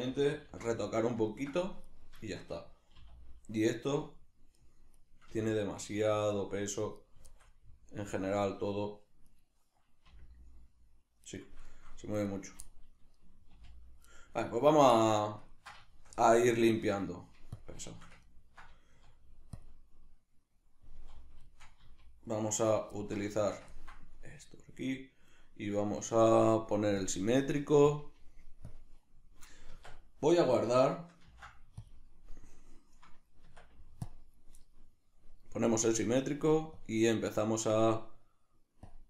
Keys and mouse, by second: 1.9 right click, 2.3-4.7 shift+middle drag, 3.0 r, 4.7 right click, 5.3 r, 7.1 right click, 7.3-9.3 shift+middle drag, 9.3 right click, 10.1 r, 11.4 right click, 11.7 shift+middle click, 12.3 right click, 12.7-14.2 middle drag, 13.5 r, 14.5 right click, 15.0-22.5 middle drag, 16.8 Tab, 18.9 z, 21.8 z, 22.5 right click, 23.0-27.0 ctrl+middle drag, 27.0-29.7 drag, 29.7 Tab, 31.2 ctrl+s, 36.8-39.0 drag.